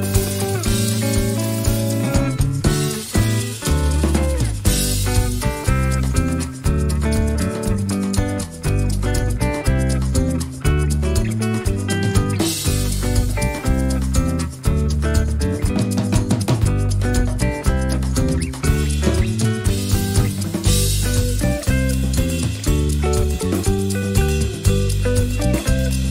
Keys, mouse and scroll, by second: 0.8 ctrl+shift+click, 2.2 ctrl+shift+click, 3.7 click, 7.2 d, 8.7 click, 9.9 click, 11.5-12.6 drag, 12.9-14.5 ctrl+shift+drag, 14.7-16.7 ctrl+shift+drag, 19.6 ctrl+d, 20.4 click, 21.0 ctrl+d, 21.5 ctrl+shift+click, 22.5 ctrl+shift++, 24.1 click, 25.6 click.